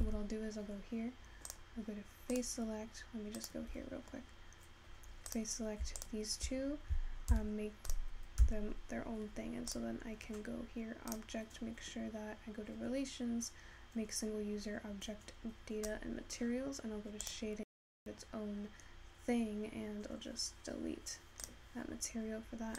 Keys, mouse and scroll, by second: 9.2 Tab, 10.8 click.